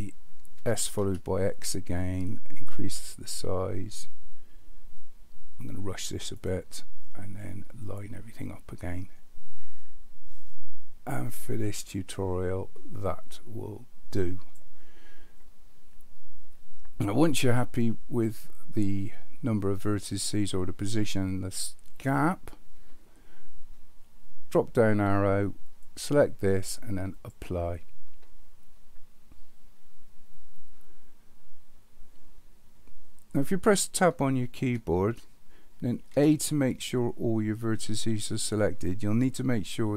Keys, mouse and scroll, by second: 0.6 s, 7.9-14.6 drag, 25.8-27.4 drag, 34.6 Tab, 36.1 a.